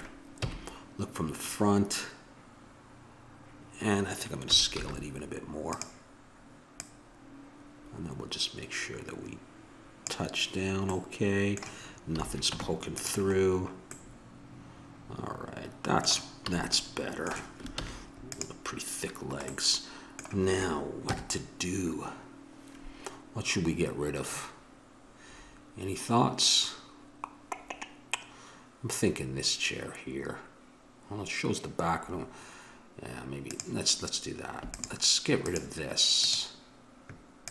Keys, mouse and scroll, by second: 0.4 KP_1, 4.4 s, 6.8-8.5 drag, 10.9 middle click, 12.0 a, 12.5 Tab, 13.4 middle click, 16.4 a, 17.7 ctrl+s, 21.0 KP_0, 33.8-37.5 right drag.